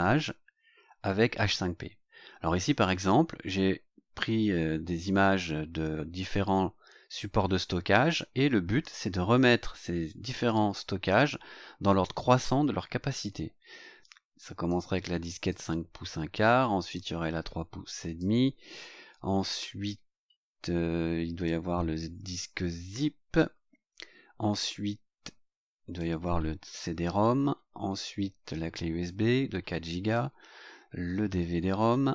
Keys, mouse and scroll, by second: 14.6 click, 16.9-18.3 drag, 21.4-23.5 drag, 25.9 click, 29.0-30.3 drag.